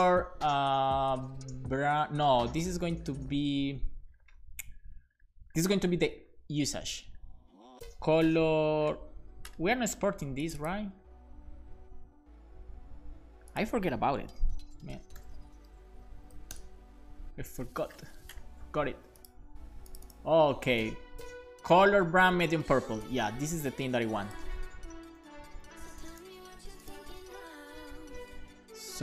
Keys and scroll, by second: 14.4 super+p, 14.7-16.2 typing, 16.5 Up, 25.2 super+c.